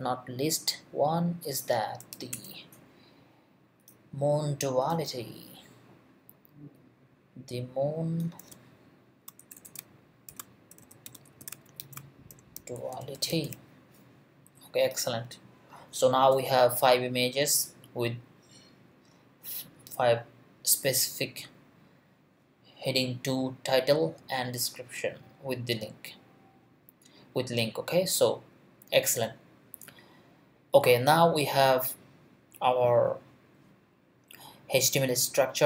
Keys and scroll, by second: 2.1 shift+', 2.3 shift+Return, 3.2 Return, 9.4-13.9 typing.